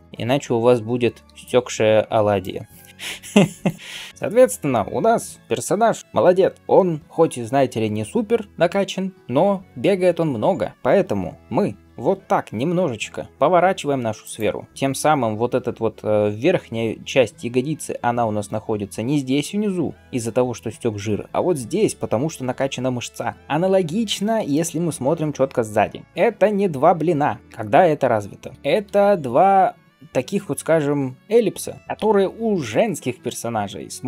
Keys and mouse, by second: 0.0-6.0 drag, 0.0-2.3 right drag, 1.1-3.2 d, 3.8 d, 4.1 r, 6.6-14.3 drag, 11.9 r, 14.3-24.2 middle drag, 24.5-34.0 shift+middle drag, 26.0 ctrl+KP_1, 28.5 s, 33.9 r.